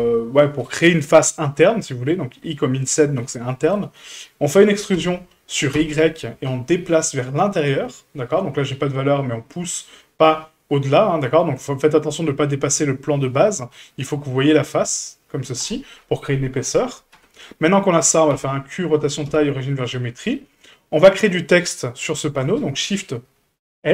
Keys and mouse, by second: 3.3 middle click, 4.9 e, 17.1 Tab, 17.7-18.0 middle drag, 18.3 q, 19.2 q, 20.3 middle drag.